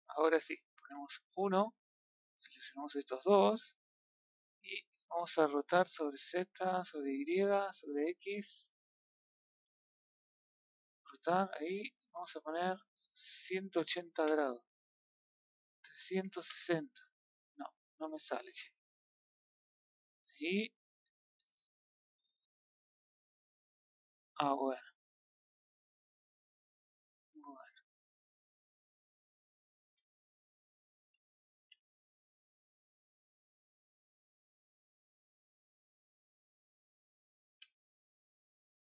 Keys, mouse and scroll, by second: 0.9 KP_1, 2.8 b, 3.5-5.5 middle drag, 5.5 r, 9.2-11.0 middle drag, 11.0 click, 14.2-17.5 drag, 17.5-18.8 middle drag, 18.8 click, 20.9-22.4 middle drag, 22.4 click, 24.5-25.7 middle drag, 25.7 scroll up 1, 25.7-30.0 middle drag, 30.0 scroll up 1, 30.1 middle click, 31.5 a, 31.9-32.5 middle drag, 32.8 click, 33.1-37.4 middle drag, 37.4 b, 38.4-38.9 middle drag.